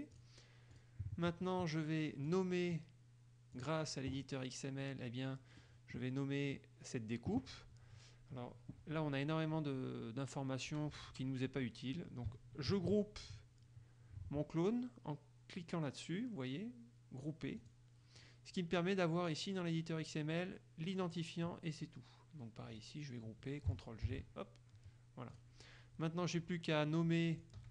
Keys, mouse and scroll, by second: 0.3 click, 0.9 click, 2.5 click, 3.7 click, 5.8 click, 6.3-12.5 middle drag, 17.8 click, 22.9 click, 24.3 ctrl+g, 25.5 click, 27.6 click.